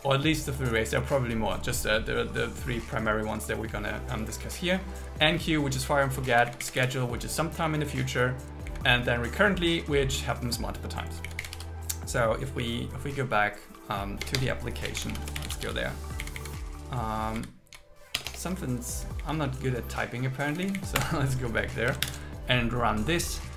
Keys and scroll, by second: 3.6 Up, 6.4 Down, 8.7 Down, 11.2 Down, 11.6 super+s, 21.0 Return, 22.0 ctrl+shift+r.